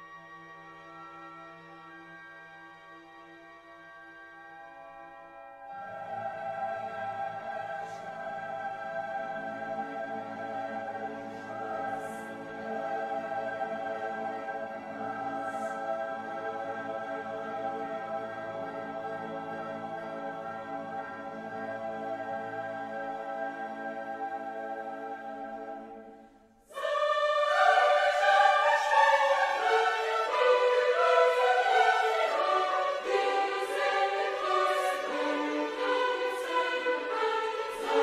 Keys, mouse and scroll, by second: 3.4 click, 7.2-12.6 drag, 13.1 middle click, 14.4 click, 17.7 click, 19.9 click, 21.5 click, 22.9 right click, 23.9 click, 25.3 click, 27.2 click, 28.8 click, 30.6-32.3 drag, 32.8 right click, 33.8 click, 35.0 click, 36.1 click, 37.1 click.